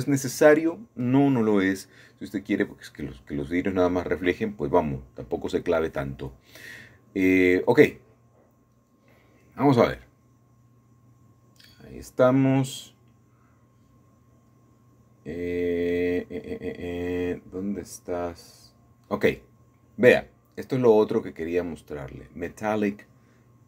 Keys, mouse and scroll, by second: 0.4 shift+middle click, 1.5 middle click, 3.9 ctrl+shift+s, 5.8 KP_Add, 6.8 Return, 8.3 click, 9.2 click, 13.0 click, 13.6-14.0 scroll down 2, 14.0 scroll up 2, 15.8 scroll down 2, 16.4-16.8 scroll down 3, 16.8 scroll up 1, 16.8-17.1 scroll down 1, 17.4 scroll up 2, 19.9-22.0 drag, 22.6 click.